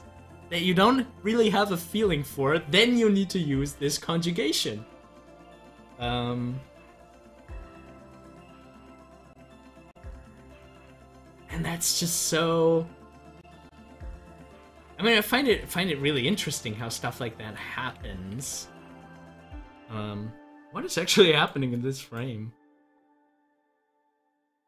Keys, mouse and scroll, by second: 11.1-15.3 drag, 15.3 Right, 19.8 scroll down 1.